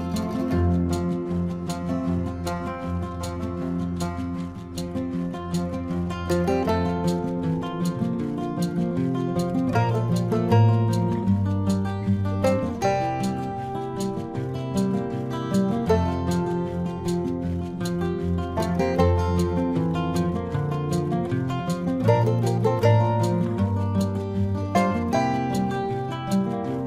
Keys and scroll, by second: 1.5 space, 12.9 space, 14.0 ctrl+alt+z, 16.4 space, 17.2 space, 17.4 ctrl+=, 17.7 ctrl+=, 19.7 ctrl+=, 19.9 space, 20.2 ctrl+=, 20.5 ctrl+-, 20.6 space, 20.8 ctrl+-, 20.9 ], 21.3 ctrl+=, 21.6 space, 22.7 space, 24.6 ctrl+alt+z, 25.4 ctrl+alt+z, 26.3 space.